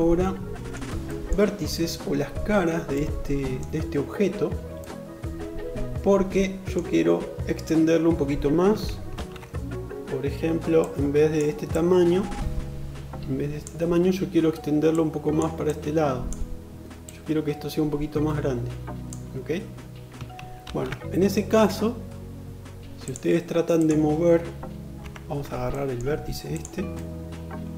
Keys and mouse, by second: 22.4 click, 23.1-27.7 middle drag, 24.3 3.